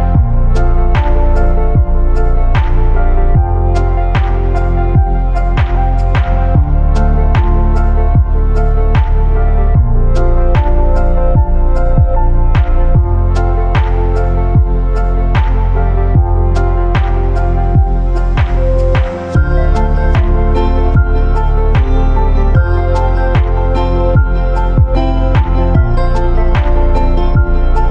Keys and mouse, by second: 0.3 click, 0.5 g, 1.6 middle click, 2.7 click, 2.9 g, 3.9 g, 4.6 click, 4.7 g, 5.6 g, 6.4 click, 6.5 g, 7.3 shift+middle click, 7.8 click, 7.9 g, 8.8 click, 9.0 g, 9.7 click, 9.9 g, 10.8 click, 11.0 g, 12.1 shift+middle click, 13.2 shift+middle click, 14.6 click, 14.7 g, 15.6 click, 15.7 g, 16.7 click, 16.9 g, 18.3 click, 18.4 g, 19.4 click, 19.6 g, 20.4 click, 20.6 g, 21.9 click, 22.1 g, 22.9 middle click, 23.6 click, 23.7 g, 24.5 click, 24.6 g, 25.4 click, 25.6 g.